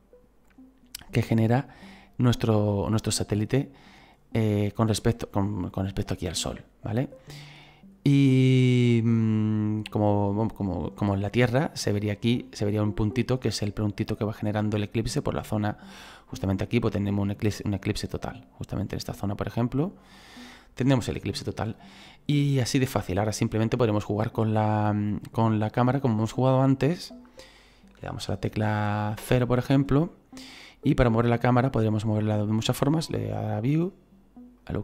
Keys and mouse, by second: 0.4 click, 5.6 click, 8.6 middle click, 9.8 click, 12.4 middle click, 13.8 click, 17.8 click, 19.5 click, 21.7 middle click, 22.8 middle click, 25.1 shift+middle click, 29.2 KP_0, 31.0 click, 33.5 click, 34.6 click.